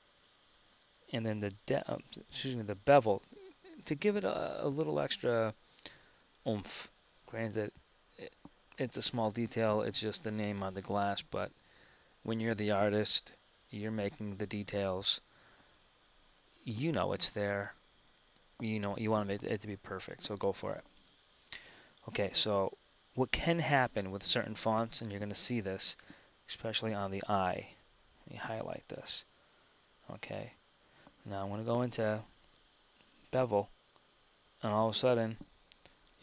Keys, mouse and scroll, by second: 26.0 KP_1.